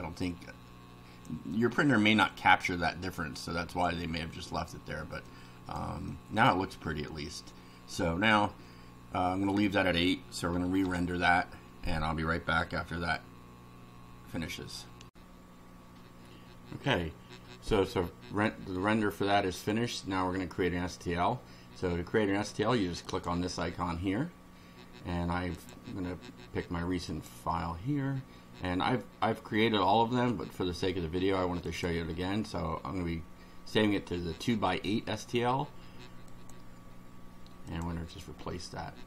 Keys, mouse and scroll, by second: 0.2-1.4 drag, 1.5 click, 3.1 click, 5.3 click, 6.1 click, 10.9 F6, 15.1 click, 23.1 click, 25.5 click, 27.1 click, 31.7 click, 36.3 click, 37.7 click.